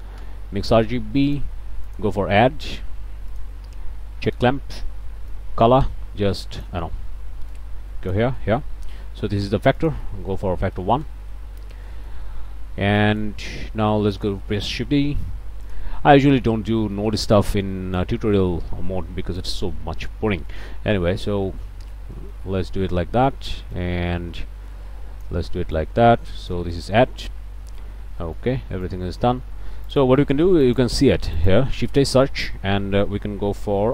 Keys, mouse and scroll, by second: 0.2 Return, 1.3 click, 1.9 click, 3.3 click, 4.3 click, 5.3-6.9 drag, 7.5 click, 8.8 scroll up 1, 9.8 click, 10.7 KP_1, 11.1 KP_Enter, 11.9 middle click, 12.2 scroll down 2, 13.0 click, 13.5 middle click, 14.1 click, 15.0 shift+d, 15.6 click, 16.2 click, 16.7 scroll down 1, 17.0 click, 17.5 click, 18.5 scroll up 1, 19.4-21.8 drag, 22.2 click, 22.8 scroll down 1, 23.7-25.5 drag, 25.8 click, 27.2-27.6 scroll up 1, 27.6 click, 28.0 scroll down 1, 28.2 click, 28.9 click, 29.9 click, 30.2 click, 30.6 shift+click, 31.0 shift+a, 31.4 shift+click.